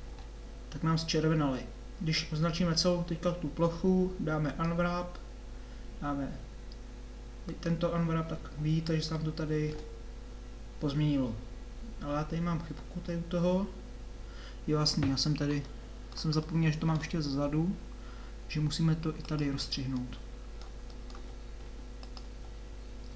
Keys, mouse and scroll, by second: 0.0 a, 2.6 a, 15.6-16.7 middle drag, 18.4-20.1 middle drag.